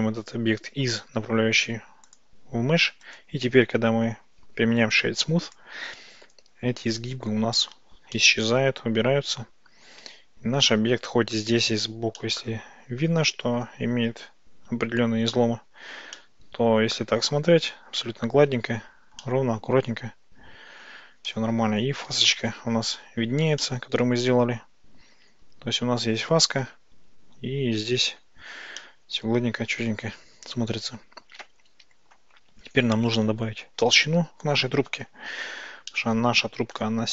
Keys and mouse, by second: 8.2-11.4 middle drag, 12.4 middle click, 16.2-17.4 middle drag, 19.4-21.0 middle drag, 22.4-22.8 shift+middle drag, 23.7-24.6 shift+middle drag, 28.8-32.2 middle drag, 36.0-36.8 shift+middle drag.